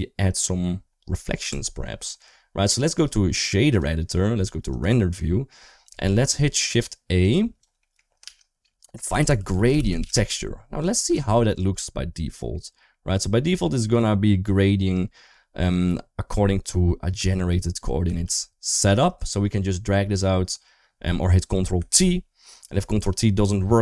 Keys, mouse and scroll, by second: 1.3 Tab, 2.7-3.6 drag, 4.7 click, 5.1 middle click, 5.7 middle click, 7.1 click, 7.6 middle click, 8.0 shift+a, 11.3 ctrl+shift+click, 12.1 shift+middle click, 12.7-14.4 middle drag, 16.3 middle click, 17.2 ctrl+t, 18.6 shift+middle click, 21.7 ctrl+t.